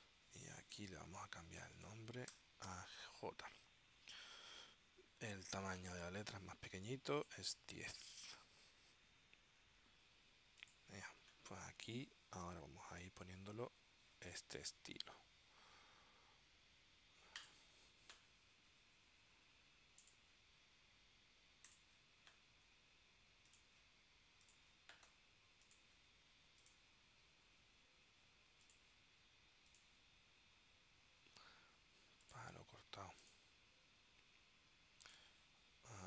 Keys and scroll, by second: 2.4 BackSpace, 2.7 shift+j.